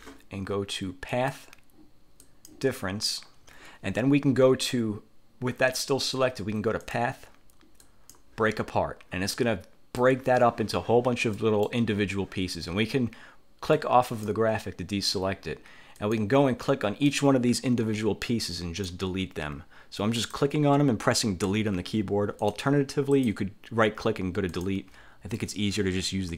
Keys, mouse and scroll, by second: 1.3 click, 2.3 click, 6.9 click, 7.9 click, 9.5 middle click, 11.5 middle click, 11.7 click, 13.9 click, 16.1 click, 16.7 click, 17.9 Delete, 18.5 click, 19.2 Delete, 20.3 click, 21.6 Delete, 22.5 click, 23.3 click, 24.7 click, 25.5 click.